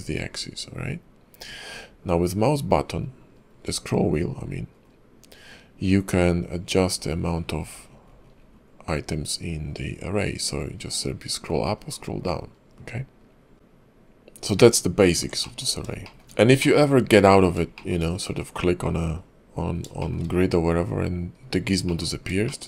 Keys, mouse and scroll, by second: 15.4 middle click, 15.7 scroll up 2, 16.0 shift+middle click, 16.3 scroll down 2, 16.6 middle click, 17.8 shift+middle click, 18.0-19.1 scroll up 2, 19.1-19.9 scroll down 1, 19.9 scroll down 2, 20.0 shift+middle click, 21.9 middle click, 22.1-22.5 scroll up 2, 22.5 shift+middle click.